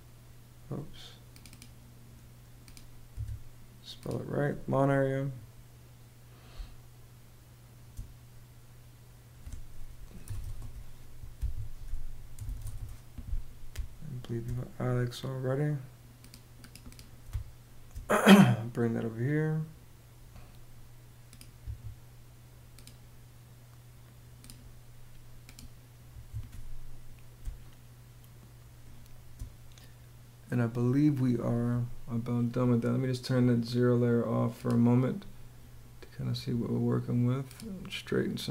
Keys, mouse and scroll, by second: 2.7 w, 6.1 space, 9.6-10.6 typing, 10.9 Escape, 11.6-13.3 typing, 16.8 space, 25.6 Escape, 26.9 space.